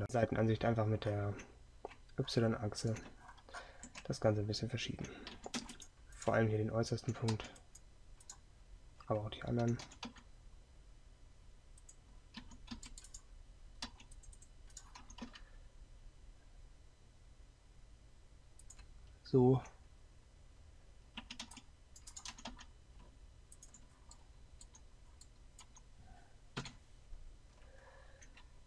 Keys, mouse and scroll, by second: 0.0 a, 0.0 c, 0.0 KP_3, 5.4 a, 5.7 c, 9.9 g, 12.4 a, 21.2 a, 21.5 c, 26.7 KP_7.